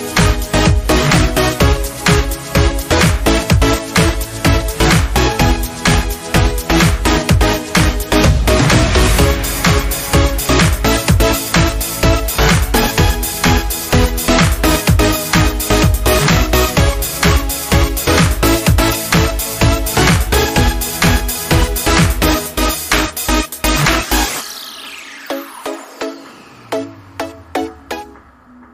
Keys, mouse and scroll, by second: 0.1 click, 0.7 shift+scroll up 1, 0.7-1.4 typing, 1.1 scroll down 1, 2.3 shift+scroll up 1, 2.5-3.2 typing, 2.6 scroll down 1, 4.5 alt+scroll up 1, 5.1-5.5 scroll up 1, 5.9-9.9 drag, 9.9 scroll down 1, 10.0 scroll up 1, 10.7 alt+scroll up 1, 12.3-15.6 alt+drag, 15.6 alt+scroll down 1, 17.3 ctrl+d, 18.4 space, 18.5 click, 18.7 space, 19.9 alt+scroll down 1, 20.8 ctrl+d, 22.9 click, 25.5-28.1 drag.